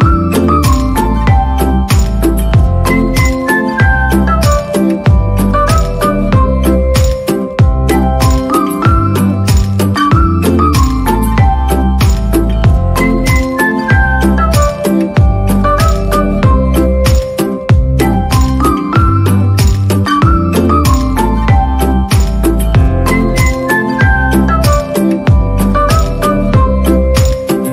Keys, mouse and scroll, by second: 0.0 right click, 0.5 ctrl+=, 1.0 ctrl+-, 1.1 ctrl+=, 1.3 right click, 1.6 ctrl+-, 1.9 ctrl+=, 3.2 right click, 3.3 ctrl+-, 3.5 ctrl+=, 3.5 ctrl+-, 4.0 right click, 5.2 right click, 5.9 ctrl+-, 6.1 ctrl+=, 7.3 right click, 8.6 right click, 8.8 right click, 9.1 right click, 9.5 ctrl+=, 9.9 right click, 10.0 ctrl+=, 10.7 ctrl+=, 11.6 ctrl+-, 11.7 ctrl+=, 12.3 ctrl+-, 12.3 ctrl+=, 14.0 right click, 19.9 right click, 25.5 right click, 26.9 right click.